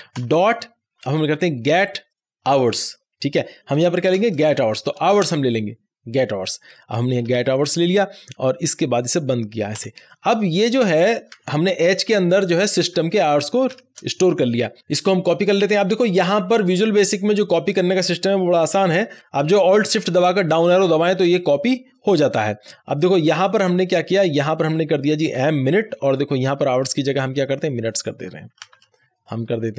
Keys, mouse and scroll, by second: 0.1-1.9 typing, 4.0-4.9 typing, 5.2 Return, 7.7 shift+9, 8.5 Right, 9.7 ;, 11.4 shift+Left, 17.3 shift+Left, 17.4 click, 19.2 ctrl+z, 19.8 ctrl+z, 20.3 alt+shift+Down, 23.4-25.3 drag, 25.3 m, 27.0-28.7 drag, 28.7 shift+m.